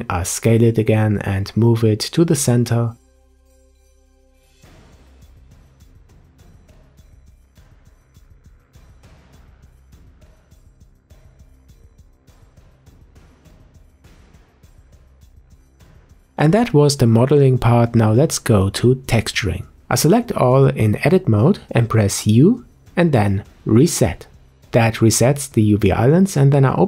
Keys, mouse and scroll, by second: 0.0-0.4 middle drag, 0.4 Tab, 0.6 a, 1.7 ctrl+click, 3.5-4.1 scroll down 4, 3.7 shift+middle click, 4.1-4.5 scroll up 3, 4.5 Tab, 5.3 Tab, 5.6 click, 6.5 s, 7.6 click, 9.5 click, 11.2 Delete, 11.6 scroll up 1, 11.9 s, 12.6 Tab, 12.8 Tab, 13.3 a, 13.4 a, 13.5 a, 14.3 click, 16.0 scroll down 4, 16.2-17.7 middle drag, 17.7-18.2 scroll up 3, 18.2 Tab, 19.9 Tab, 20.6-21.7 scroll up 1, 22.1 u, 26.3-26.8 drag.